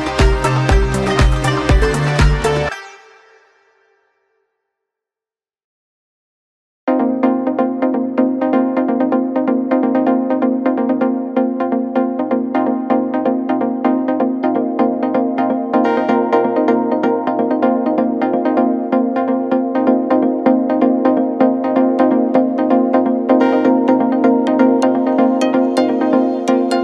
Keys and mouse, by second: 0.0-1.6 typing, 9.8 shift+d, 10.4-15.3 drag, 14.0 KP_1, 14.1 KP_3, 14.7 r, 15.3-17.3 middle drag, 15.8 g, 17.3-22.0 drag, 19.9 shift+d, 21.3 s, 22.0-23.4 middle drag, 22.3 s, 23.4-25.4 drag, 24.0 s, 25.4-26.6 middle drag, 25.9 s, 26.6-26.8 drag.